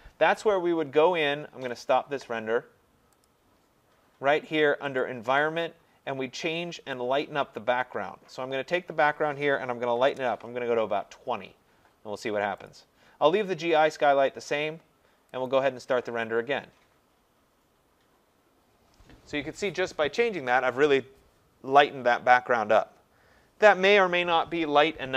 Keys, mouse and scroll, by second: 1.9 click, 3.3 click, 5.0 click, 9.7-10.5 typing, 12.7 click, 15.5 click.